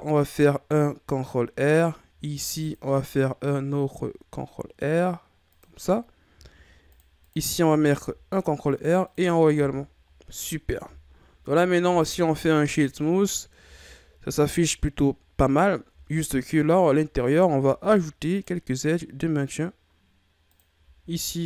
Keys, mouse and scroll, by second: 2.3 ctrl+r, 6.5 ctrl+r, 7.9 ctrl+r, 9.0 click, 9.5 a, 9.8-10.1 scroll down 5, 10.7 scroll up 1, 10.8 Tab, 11.8 w, 13.6 a, 13.9-14.5 scroll up 4, 14.7-15.9 ctrl+scroll up 7, 15.9 Tab, 17.6 ctrl+r, 21.0 ctrl+r.